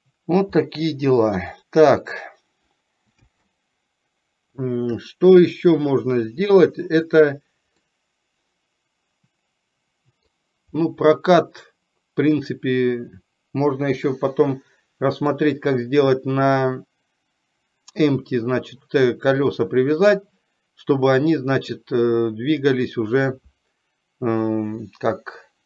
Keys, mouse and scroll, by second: 0.9 middle click, 3.4 space, 7.9-10.6 middle drag, 14.2-15.7 middle drag.